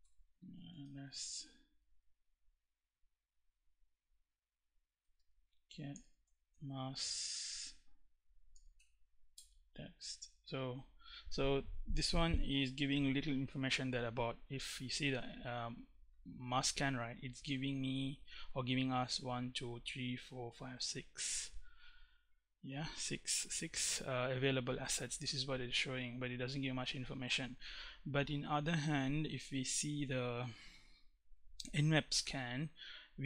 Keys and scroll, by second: 0.0-2.1 typing, 4.2-5.9 typing, 6.1 Tab, 8.2 x, 8.4 Tab, 9.0 Return.